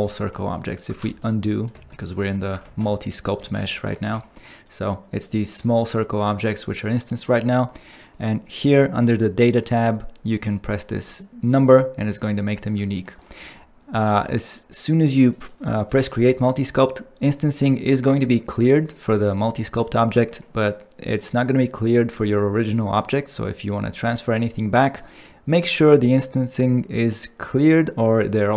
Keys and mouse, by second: 1.1 ctrl+z, 1.8 ctrl+z, 2.9 ctrl+z, 3.5 ctrl+z, 5.1 click, 5.5 click, 11.1 click, 12.9 ctrl+middle click, 15.8 ctrl+click.